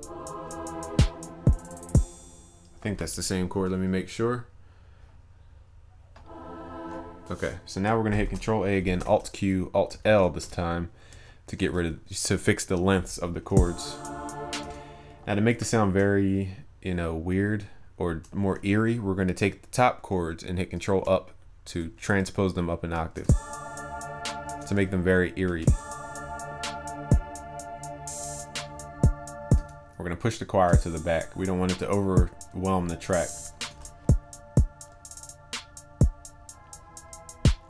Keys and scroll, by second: 8.2 ctrl+a, 9.0 alt+q, 10.1 alt+l, 11.6 ctrl+s, 20.9 ctrl+Up, 33.7 ctrl+s.